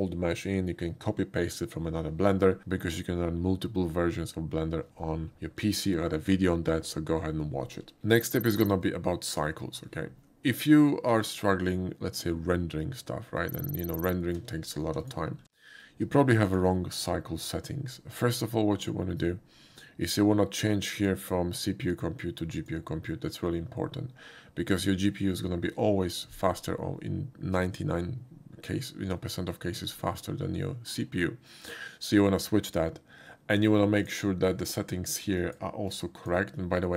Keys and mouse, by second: 8.0 n, 8.5 middle click, 13.4 click, 14.2 shift+middle click, 14.8 x, 15.0 click, 15.7 shift+middle click, 16.5 shift+click, 21.0 click, 22.5 click, 34.0 click, 34.7 click, 35.4 click, 35.9-36.3 drag.